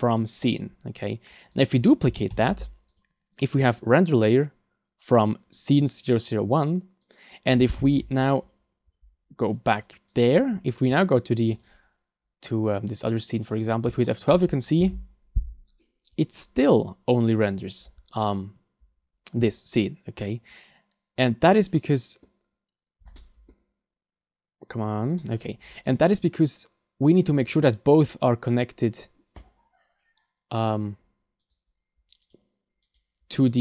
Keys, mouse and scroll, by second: 10.2 click, 11.5 click, 13.1 click, 14.1 shift+middle click.